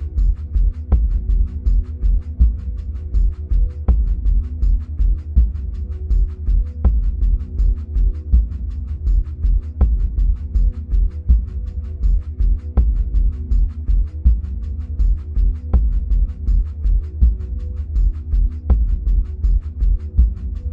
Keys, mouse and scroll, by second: 0.6-2.7 middle drag, 0.6-2.7 scroll down 2, 2.7-3.0 drag, 6.0-12.1 middle drag, 9.5-10.2 scroll up 2, 10.2 scroll up 1, 12.1-17.7 drag, 17.7-20.7 middle drag.